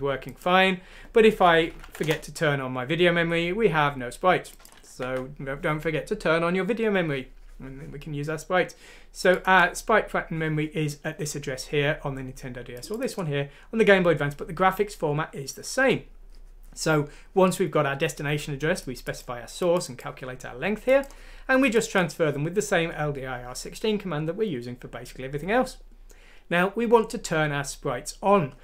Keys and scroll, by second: 1.8 F6, 2.0 Return, 4.8 ctrl+z.